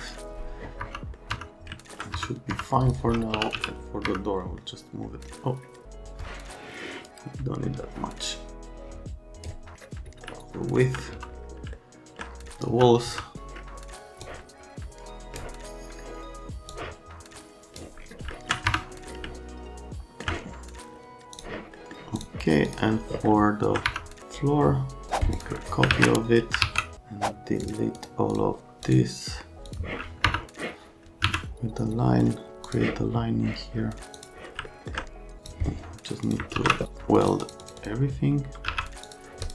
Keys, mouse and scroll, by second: 0.0-0.1 typing, 0.8 F3, 1.3 F3, 2.1 F3, 2.5 F3, 3.1-4.0 typing, 4.4 right click, 5.8 click, 8.7 click, 10.2 middle click, 11.1 F3, 11.7 alt+middle click, 12.6 F3, 13.1 F3, 14.2 click, 16.7 middle click, 18.3 alt+right click, 23.3 alt+middle click, 23.9 F3, 24.2 click, 25.3 click, 25.6 right click, 26.6 alt+1, 27.6 ctrl+click, 28.0 ctrl+click, 28.3 ctrl+click, 28.9 ctrl+click, 29.7 click, 30.3 F3, 31.2 1, 32.6 click, 34.2 click, 34.7 alt+middle click, 35.4 click, 36.2 click, 36.6 ctrl+a, 37.2 click, 37.4 click, 37.6 click, 37.8 click, 38.7 1, 39.0 click, 39.4 click.